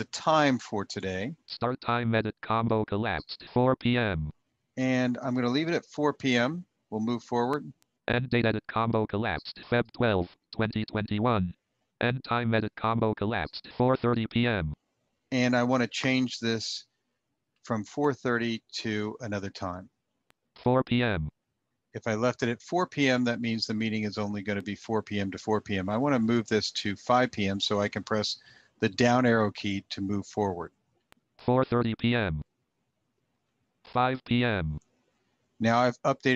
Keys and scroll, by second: 28.4 Down, 33.0 Down.